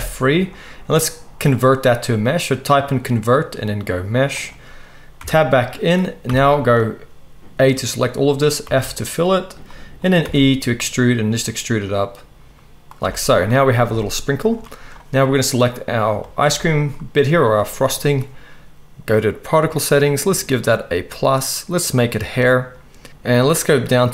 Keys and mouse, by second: 5.2 Tab, 6.3 a, 8.7 f, 10.2 e, 13.0 Tab, 19.2 click, 19.4-20.7 middle drag, 20.7-22.3 drag, 22.3 middle click, 23.1-24.1 drag.